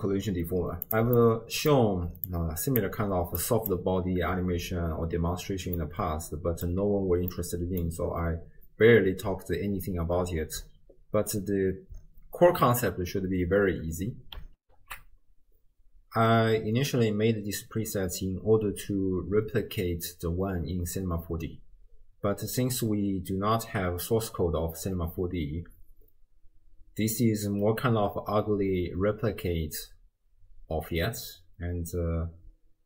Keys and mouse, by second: 1.3 click, 2.3 click, 3.5 click, 6.0 middle click, 7.4 middle click.